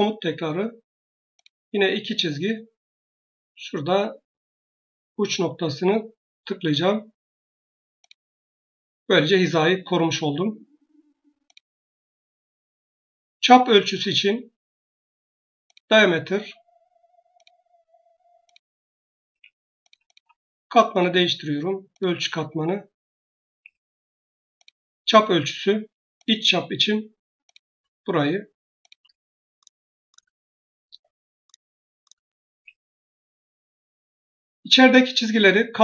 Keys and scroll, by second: 19.2 Escape, 23.3 Escape.